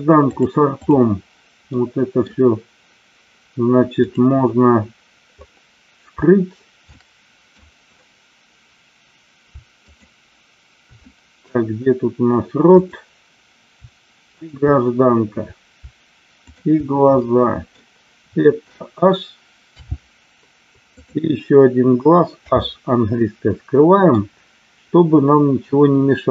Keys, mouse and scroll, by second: 0.5 click, 1.7-2.2 middle drag, 4.0 click, 6.9-7.4 middle drag, 9.7 shift+click, 11.0-11.4 middle drag, 12.7 click, 16.3 shift+click, 17.2 middle click, 19.7 h, 22.4 h, 23.2-24.1 middle drag.